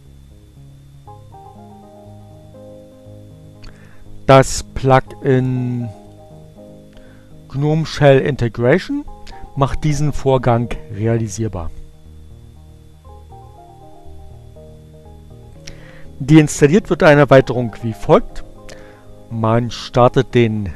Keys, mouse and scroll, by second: 8.0 click, 8.8 click, 10.7 click, 11.7 click, 16.6-17.7 drag.